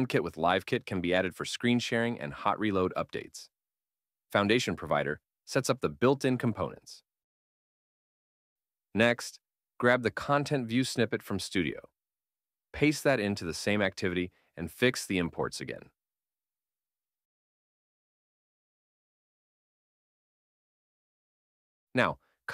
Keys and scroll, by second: 6.8 super+Tab, 11.3 super+c, 12.0 super+Tab, 13.5 super+v, 14.9 alt+Return, 16.9 alt+Return, 19.5 super+Tab.